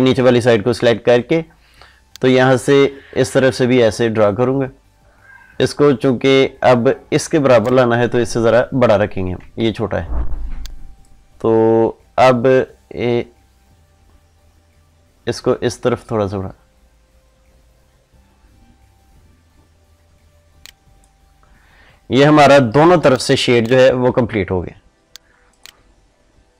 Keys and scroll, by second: 9.5 ctrl+z.